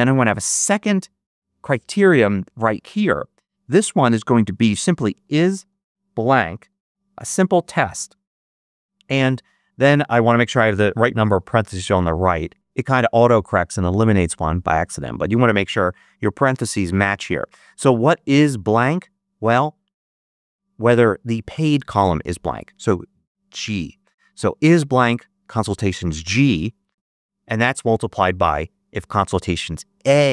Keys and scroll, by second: 0.8 shift+Left, 4.9-7.3 typing, 8.6 shift+9, 10.2 shift+0.